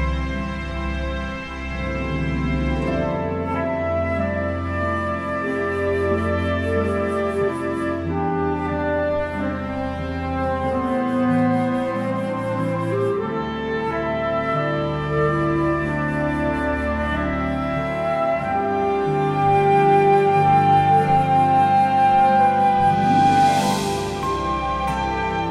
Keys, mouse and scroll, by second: 0.3 scroll down 1, 0.7 alt+a, 1.0-1.7 scroll up 3, 1.5 click, 1.7 click, 2.0 shift+g, 2.8 KP_Decimal, 2.9 scroll down 7, 3.1 middle click, 4.1 click, 4.4 scroll down 2, 4.7 ctrl+z, 4.8 scroll down 1, 5.1 g, 5.6 KP_Decimal, 5.7-6.3 scroll down 3, 6.1 click, 6.5 alt+a, 6.6 scroll up 2, 6.7 click, 6.8 scroll down 3, 6.9 scroll up 1, 7.2 shift+middle click, 7.4 click, 8.0 click, 8.4 click, 8.9-9.6 scroll up 7, 8.9 middle click, 9.1 shift+middle click, 9.4 click, 11.1 click, 11.1 r, 12.1 click, 14.5 alt+a, 14.5-14.9 scroll down 9, 14.8 scroll up 3, 14.9 scroll down 2, 15.1 shift+middle click, 15.2 scroll up 1, 15.3 scroll down 1, 15.3 shift+middle click, 15.6 click, 15.9 click, 16.8 click, 16.9 scroll down 8, 16.9 KP_Decimal, 17.1 middle click, 17.3 click, 17.6 click, 19.0 scroll down 5, 19.0 r, 19.2 shift+middle click, 19.4 click, 19.6 click, 19.8 shift+middle click, 20.1 click, 20.5 click, 21.0 KP_Decimal, 21.1 scroll down 12, 21.3 shift+middle click, 21.4-21.8 scroll up 3, 21.5 middle click, 21.8 click, 22.2 shift+middle click, 22.2 scroll up 3, 22.3 middle click, 22.5 click, 23.1 click, 25.0-25.5 scroll down 7, 25.1 shift+middle click, 25.3 scroll up 7.